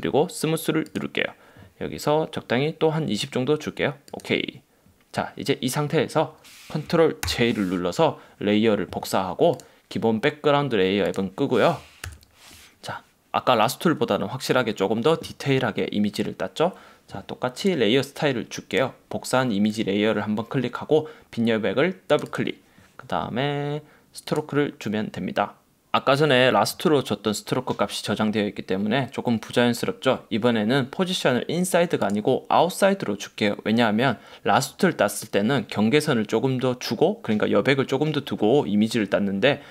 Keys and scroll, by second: 7.3 super+j, 12.1 super+-.